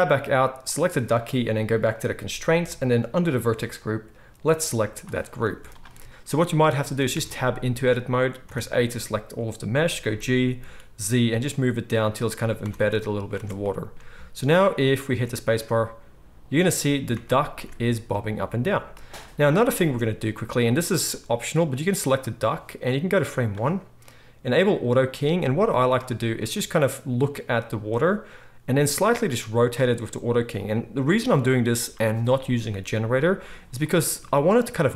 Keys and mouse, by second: 0.7-3.4 middle drag, 3.4-6.1 drag, 5.4 z, 6.1-20.6 middle drag, 7.1 Tab, 8.4 a, 10.0 g, 12.6 Tab, 13.3 alt+a, 15.1 space, 17.4 ctrl+s, 19.7 space, 20.6 click, 20.7-22.5 middle drag, 22.5-24.6 drag, 24.6-30.6 middle drag, 29.0 r, 30.6-34.9 drag.